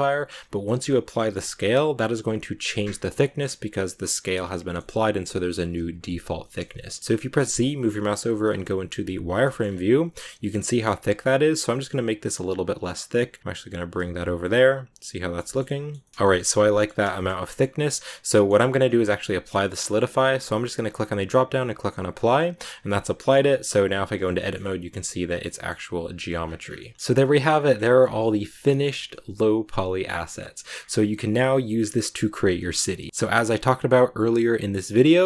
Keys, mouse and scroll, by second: 0.0 middle click, 0.5 scroll up 1, 0.5-5.8 middle drag, 5.8 z, 6.3-7.3 shift+middle drag, 7.3 z, 9.3 shift+middle click, 9.5 scroll up 2, 11.3-14.0 shift+drag, 14.2 z, 14.3-16.1 middle drag, 16.1 z, 16.2 middle click, 16.8 a, 17.0-19.2 shift+middle drag, 19.2 click, 20.8-22.1 drag, 22.1 z, 22.3 scroll down 1, 22.5 middle click, 22.6 Tab, 23.1 right click, 23.2 Tab, 23.6 right click, 23.7 Tab, 24.1 a, 24.2 middle click, 24.8 a, 25.1 right click, 25.3 middle click, 25.9 right click, 26.0 scroll down 1, 26.3 scroll up 1, 26.4 Tab, 26.5 scroll down 3, 26.7-27.9 middle drag, 27.9-29.0 scroll up 2, 29.0-30.6 middle drag, 30.6 scroll down 1, 31.0-35.2 middle drag.